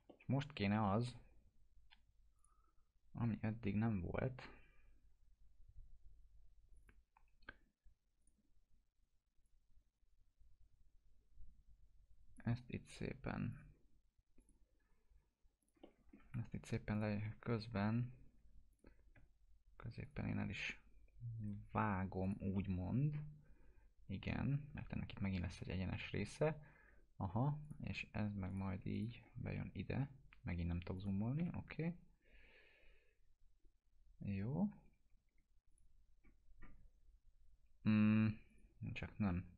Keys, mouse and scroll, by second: 0.1 alt+middle click, 2.4 click, 6.7-12.6 drag, 15.8 alt+middle click, 16.3 2, 16.9 click, 18.7 shift+click, 20.0 click, 21.4 right click, 22.2 click, 22.5-23.1 alt+middle drag, 27.6 click, 29.4 scroll up 1, 30.9 click, 31.4 Delete, 33.0 scroll up 1, 34.2-34.7 scroll down 1, 34.9 2, 35.7 click, 36.1 scroll down 1, 38.8 click, 39.0 ctrl+z.